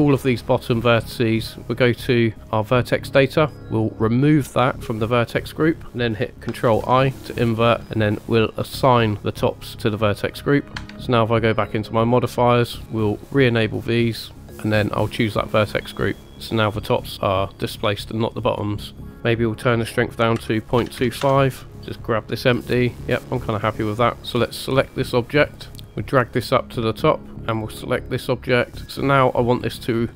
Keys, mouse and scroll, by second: 1.2 click, 4.0 click, 6.6 ctrl+i, 8.3 click, 10.7 Tab, 11.6 click, 12.0-12.5 middle drag, 13.3 click, 14.4 click, 15.2-16.3 drag, 16.3-17.2 middle drag, 17.8-18.6 middle drag, 19.1-21.7 drag, 22.6 g, 23.8 right click, 24.4 click, 25.9-27.0 drag, 27.4 click.